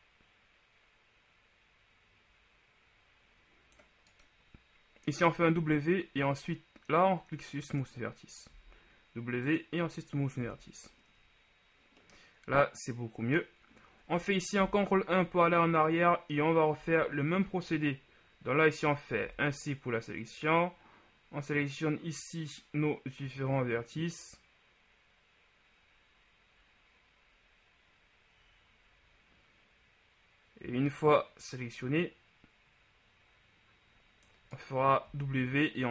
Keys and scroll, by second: 5.8 w, 8.7 w, 14.8 ctrl+KP_1, 17.0 Tab, 19.5 c, 35.3 w.